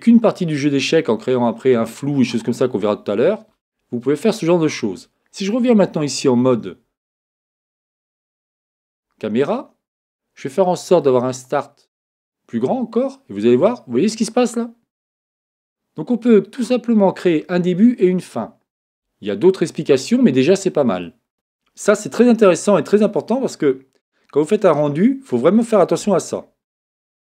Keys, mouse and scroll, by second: 6.1 KP_0, 11.0-13.0 drag, 21.0 click, 23.7-25.9 middle drag.